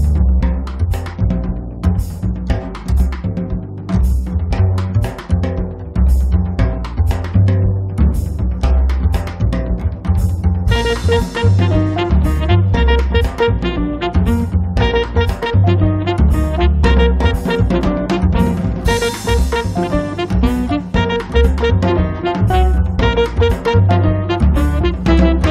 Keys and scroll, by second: 2.0 m, 6.7 m, 11.6 space, 18.1 p, 21.8 space, 22.8 Escape.